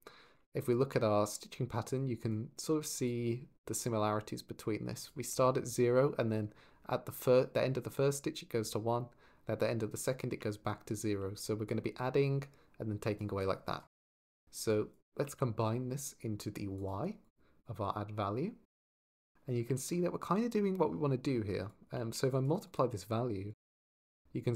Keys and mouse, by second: 0.4 ctrl+shift+click, 2.0 ctrl+shift+click, 2.8 ctrl+shift+click, 3.5 ctrl+shift+click, 4.8 ctrl+shift+click, 11.4-13.7 d, 11.5 click, 13.3 click, 14.5 click, 17.4 drag, 21.5 click, 21.8 shift+d, 22.1 click, 22.5 click, 23.7 shift+click.